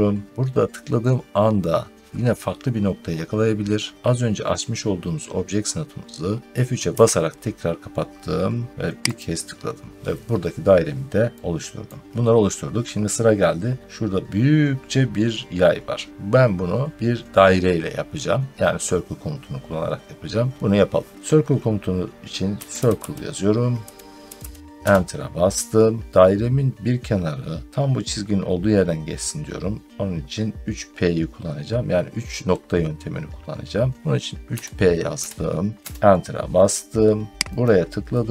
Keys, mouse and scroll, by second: 6.8 F3, 9.0 click, 10.4 middle click, 10.5 middle click, 10.7 scroll down 2, 10.9 middle click, 11.3 scroll, 11.7 middle click, 22.1-24.8 typing, 26.7 middle click, 26.8 middle click, 34.4-35.0 typing, 35.8 Return, 37.5 click.